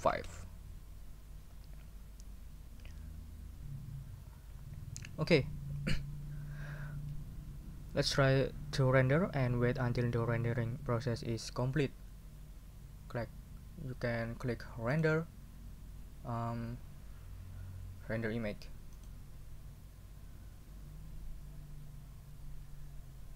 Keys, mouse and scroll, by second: 0.1 5, 0.2 Return, 4.6 scroll down 2, 14.9 click, 18.9 click.